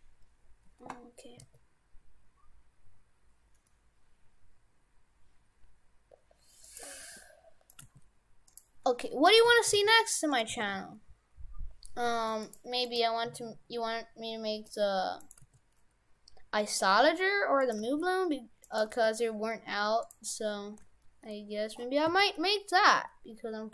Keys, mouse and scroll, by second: 1.4 s, 6.9 g, 7.9 g, 9.3 right click, 9.5 shift+f, 10.6 shift+f, 12.9 right click, 13.7-14.7 scroll down 15, 14.7 g, 15.4 g, 17.8 g, 18.9 g, 20.3-21.2 scroll up 10, 21.3 middle click, 22.1 s.